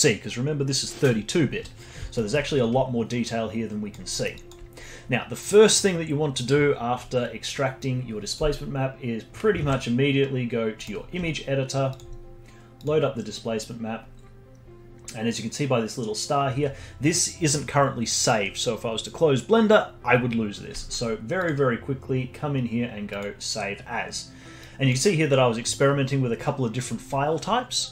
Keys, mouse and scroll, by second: 2.1-2.5 alt+middle drag, 2.5-4.1 alt+drag, 4.1 alt+middle drag, 4.3-7.3 alt+drag, 7.8-9.5 drag, 9.5 ctrl+alt+s, 11.9-14.0 drag, 14.0-18.0 scroll down 9, 21.4-23.5 drag.